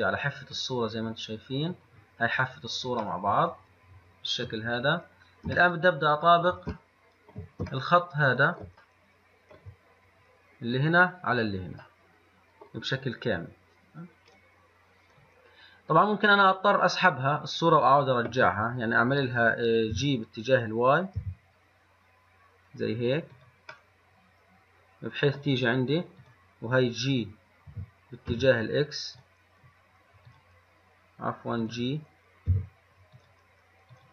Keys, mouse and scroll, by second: 3.3-5.0 middle drag, 5.0-5.4 scroll up 2, 5.9-14.5 shift+middle drag, 14.5 click, 20.2 g, 24.2-26.4 middle drag, 26.4 click, 27.9 g, 28.5 x, 30.5 click, 31.9 click, 32.7 g, 33.4 click.